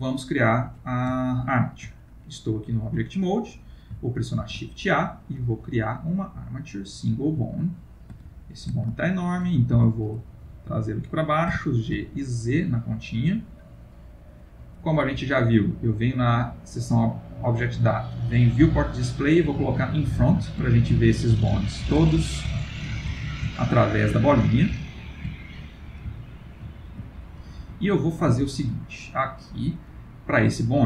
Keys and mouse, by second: 1.2 ctrl+middle click, 4.4 shift+a, 7.7 ctrl+middle click, 8.4-8.8 shift+middle click, 8.5 shift+middle click, 9.0 ctrl+middle click, 9.8 Tab, 10.3 click, 11.5 g, 15.8 click, 18.0 click, 20.8 ctrl+middle click, 21.5 shift+middle click, 21.9 ctrl+middle click, 22.7 shift+middle click, 23.1 ctrl+middle click, 23.7 middle click, 24.5 shift+middle click, 24.9 ctrl+middle click, 25.0 ctrl+middle click, 25.3 middle click, 25.7 middle click, 26.1 ctrl+middle click, 27.2 ctrl+middle click, 27.7 ctrl+middle click, 27.9 middle click, 28.4 shift+middle click, 29.4 click, 30.3 click.